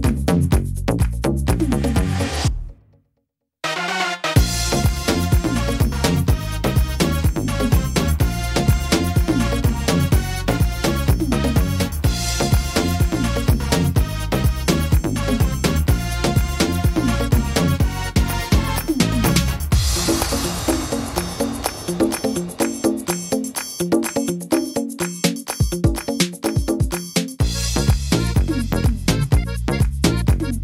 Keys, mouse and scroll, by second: 8.6 click, 8.6 e, 9.5 middle click, 11.6 e, 12.7 click, 14.3 middle click, 15.1 e, 16.4 click, 17.6 middle click, 19.5 click, 20.6 middle click, 21.2 shift+middle click, 21.8 middle click, 22.3 e, 24.1 click, 25.4 middle click, 26.0 shift+middle click, 26.6 e, 28.1 click, 30.1 click.